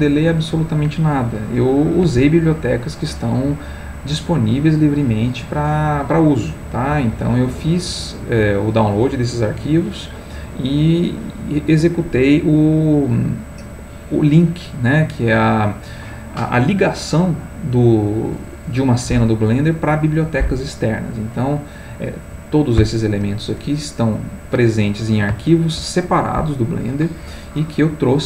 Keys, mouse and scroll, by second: 6.2-9.2 middle drag.